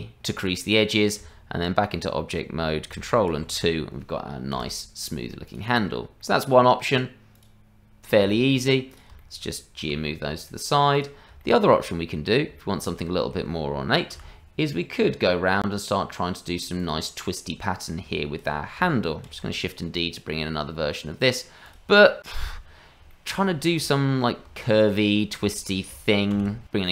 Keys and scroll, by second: 1.2 Tab, 3.3 ctrl+2, 4.5 KP_Divide, 9.8 g, 14.1 g, 19.3 shift+d, 25.2 shift+a.